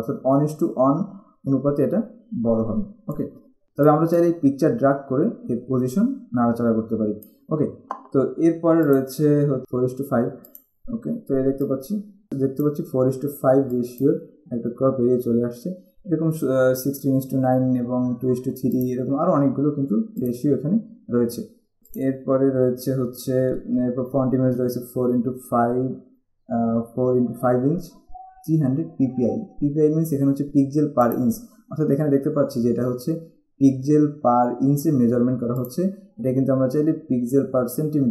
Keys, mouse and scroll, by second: 9.1 click, 10.7 click, 13.9 click, 19.0 click, 20.5 click, 21.8 z, 21.9 click, 31.2 click, 35.8 click.